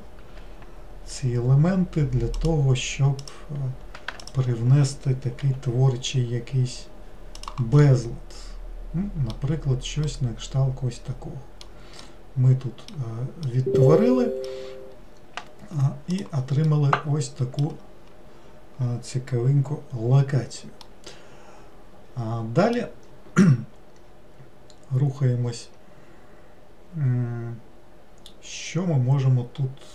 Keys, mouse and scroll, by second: 1.1 g, 3.2 click, 4.2 alt+click, 5.4 g, 7.9-9.6 middle drag, 9.6-10.1 scroll down 2, 10.1-14.8 middle drag, 14.8-16.1 scroll down 1, 16.1 click, 16.7-19.8 middle drag, 20.0-20.8 scroll up 1, 20.8-23.9 middle drag.